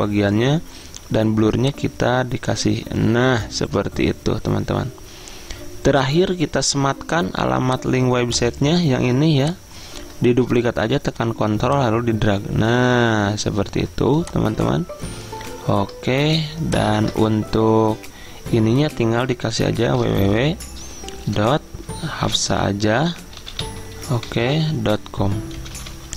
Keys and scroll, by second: 17.1 ctrl+a, 20.1-26.1 typing.